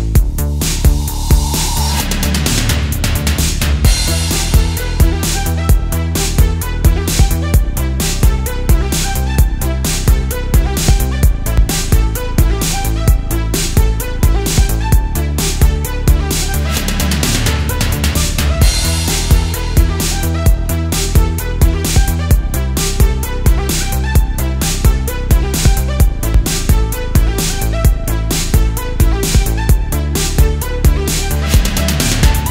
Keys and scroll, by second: 0.0 super+z, 0.3 space, 0.9 space, 2.4 space, 3.6 space, 4.4 super+z, 5.6 space, 6.8 super+space, 7.3 super+z, 8.7 super+z, 10.0 space, 11.6 space, 13.3 space, 14.2 space, 14.6 super+z, 15.1 space, 15.9 space, 17.4 space, 18.8 super+z, 19.1 super+z, 19.4 alt+super+space, 20.6 space, 22.7 space, 24.7 super+z, 25.6 space, 26.9 super+space, 27.1 super+space, 27.4 super+z, 28.6 space, 29.1 super+space, 29.7 space, 30.0 space, 30.5 space, 30.8 space, 31.6 super+space.